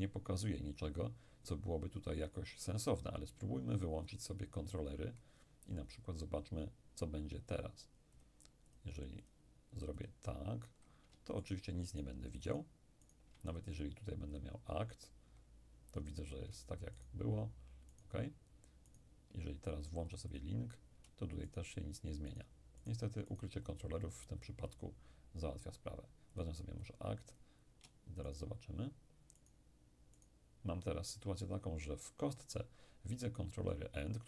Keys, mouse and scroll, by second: 4.4 click, 8.2-11.1 drag, 11.5-14.1 shift+right drag, 14.4 click, 17.0-20.0 shift+right drag, 20.4 click, 21.5-25.3 shift+right drag, 24.3 shift+click, 26.4-29.4 drag, 28.3 shift+right click, 29.5 shift+right click.